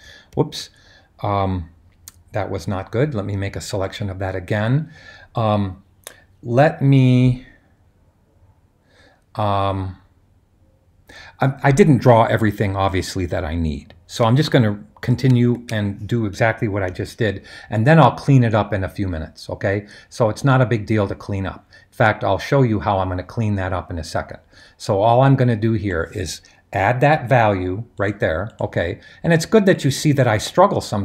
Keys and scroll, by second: 15.4 shift+super+i, 16.9 super+h.